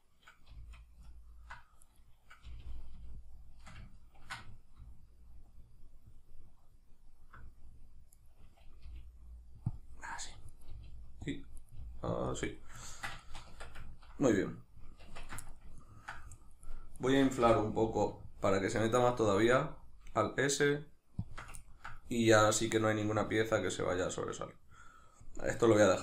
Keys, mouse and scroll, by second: 0.5 g, 2.0 right click, 2.4 g, 8.3 right click, 8.9 g, 9.8 click, 10.5 right click, 10.7 g, 11.4 click, 11.6 right click, 11.8 g, 12.4 click, 12.8-17.0 ctrl+middle drag, 13.5 Tab, 15.0 Tab, 17.0 right click, 17.4 l, 18.1-19.4 middle drag, 19.4 alt+s, 21.4 shift+click, 21.6 ctrl+middle click.